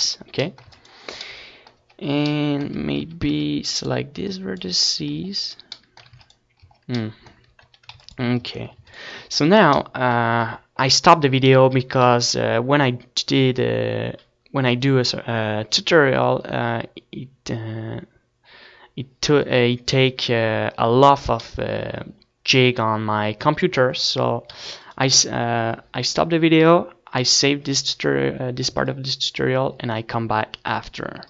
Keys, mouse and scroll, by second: 0.0 a, 0.4 a, 0.6 a, 1.2 right click, 1.8 click, 2.7 Tab, 3.7 ctrl+s, 4.2 Tab, 5.4 a, 5.7 ctrl+s, 6.0 Tab, 6.6 ctrl+s, 10.0 middle click, 12.8-17.5 middle drag, 20.3-23.7 middle drag, 23.7 ctrl+s, 28.3 ctrl+s.